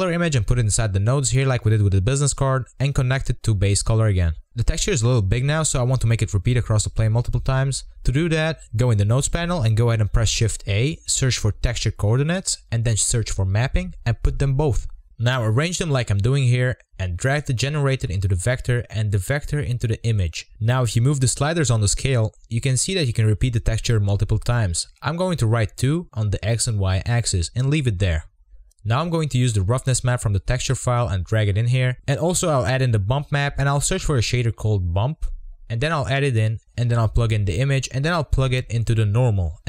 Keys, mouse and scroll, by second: 0.0 scroll up 3, 4.4 click, 4.5-5.4 scroll down 4, 5.5 scroll up 2, 6.2-6.8 scroll up 1, 6.8-7.6 scroll up 1, 13.3-14.6 drag, 16.1-17.5 drag, 17.5-18.1 scroll down 4, 18.1-18.6 shift+middle drag, 18.6-19.5 scroll down 1, 19.5 scroll down 1, 19.7-29.9 drag, 31.8 click, 32.3 click, 33.0 scroll down 1, 33.8 click, 34.4 click, 34.9 shift+a, 35.8-36.1 shift+middle drag, 36.1 drag, 37.2 click, 38.7 scroll down 1, 38.8 middle click, 38.9 scroll up 2, 39.0 z, 39.2 scroll down 1, 39.3 shift+middle click.